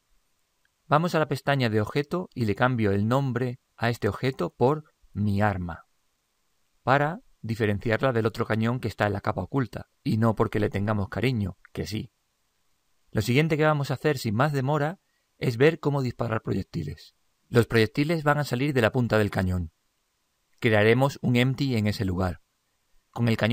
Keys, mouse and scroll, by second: 3.1 click.